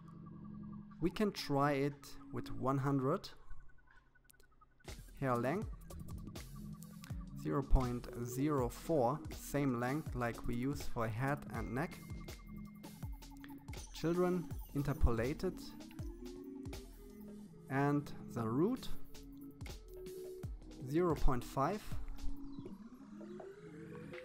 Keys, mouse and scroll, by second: 1.4 0, 4.5-6.0 drag, 10.0-13.4 scroll down 11, 13.4 click, 14.0-15.5 scroll down 8, 15.5-16.9 scroll down 1, 17.0-18.6 drag, 23.6-24.2 drag.